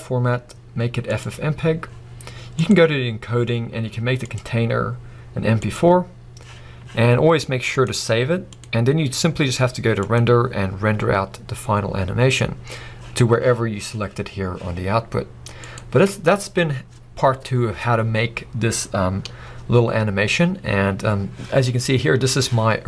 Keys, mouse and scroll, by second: 16.6 scroll down 1, 19.3 scroll up 1.